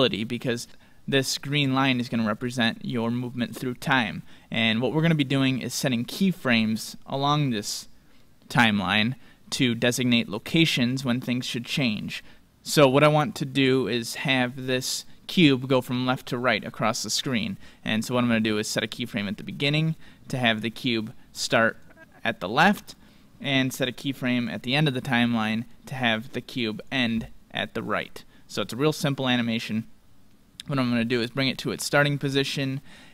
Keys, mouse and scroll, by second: 10.5-12.4 drag, 18.6-20.5 drag, 20.9-22.6 drag, 24.0-27.6 drag, 29.1-31.1 drag.